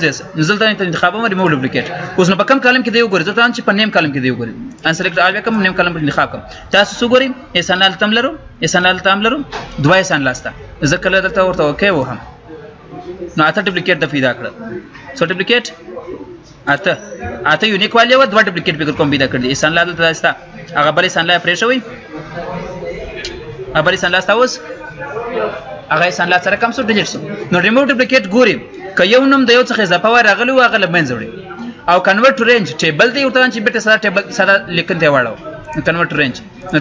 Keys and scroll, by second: 28.3 ctrl+z.